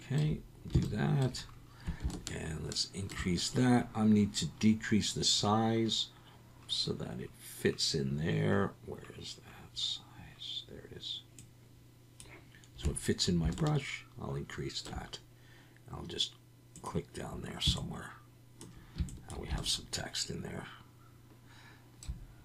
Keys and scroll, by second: 0.8 ctrl+alt+Left.